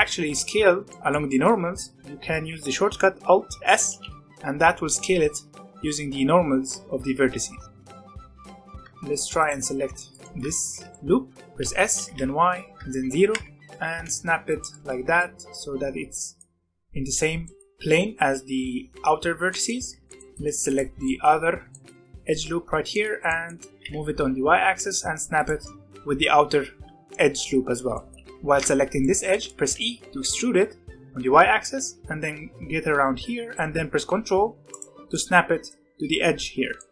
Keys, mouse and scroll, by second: 0.9-3.9 middle drag, 3.9 alt+s, 8.3 z, 8.4 scroll down 1, 8.5 middle click, 8.7 scroll up 1, 8.8 middle click, 9.3 alt+click, 9.9 shift+middle click, 10.4 scroll up 1, 10.5 alt+a, 10.9 middle click, 11.5 s, 13.5 g, 14.6 ctrl+middle click, 15.0 z, 15.2-17.1 middle drag, 17.1 scroll up 1, 17.4-19.2 shift+middle drag, 19.2 scroll down 1, 19.5 shift+middle click, 19.8 z, 20.0 shift+middle click, 20.6 alt+click, 21.0 shift+middle click, 21.3-21.7 scroll up 1, 21.7 shift+middle click, 22.5 z, 22.9 middle click, 23.7 g, 26.9-28.1 shift+middle drag, 28.1 g, 29.0 middle click, 29.7 e, 35.1-36.9 middle drag.